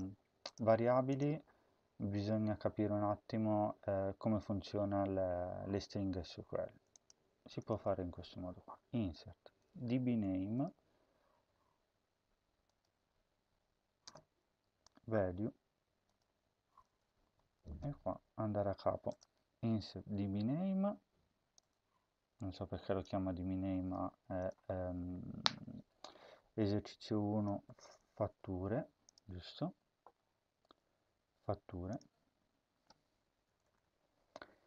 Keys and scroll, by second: 7.5 Return, 8.5 Tab, 13.9 Return, 17.1 Left, 17.5 Return, 18.2 BackSpace, 27.2-28.4 typing, 33.1-34.2 typing.